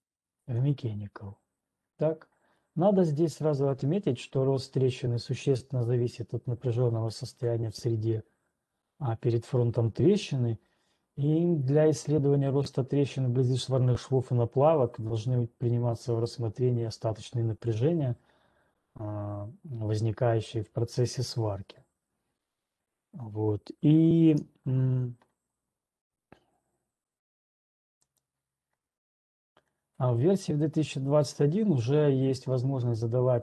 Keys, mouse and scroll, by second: 24.1 right click, 24.5 alt+Tab, 28.8 alt+click.